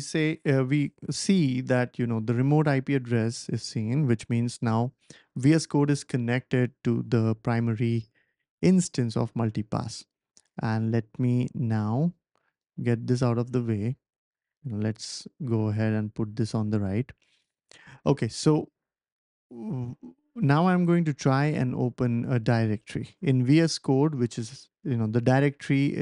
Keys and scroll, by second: 12.3 typing.